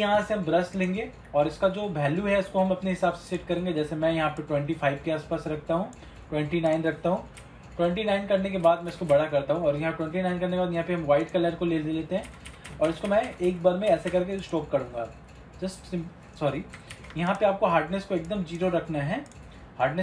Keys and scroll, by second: 17.1 ctrl+z.